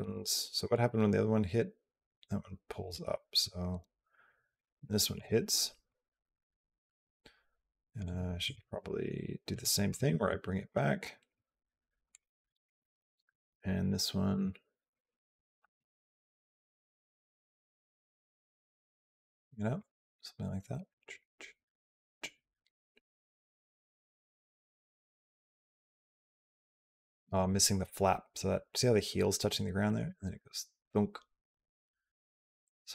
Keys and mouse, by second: 0.5-4.4 drag, 5.0 click, 5.7-7.8 drag, 8.3 click, 9.7 g, 14.1 g, 15.4 r, 16.5 g, 17.7 g, 19.6-32.9 drag.